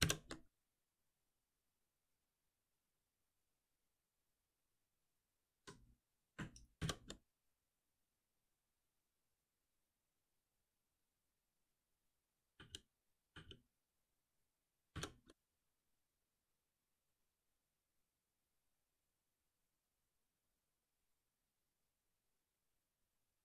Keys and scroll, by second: 0.0 shift+F10, 5.4 ctrl+y, 6.7 shift+F10, 12.1 shift+F10, 12.5 ctrl+z, 14.9 shift+F10.